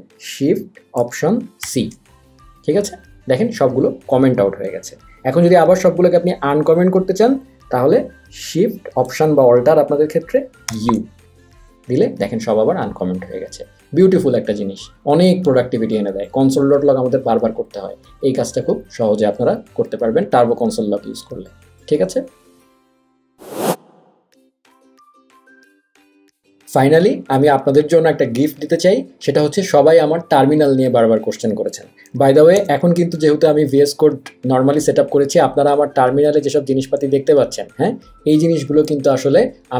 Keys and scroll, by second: 1.8 alt+shift+c, 10.8 alt+shift+u, 32.8 ctrl+`.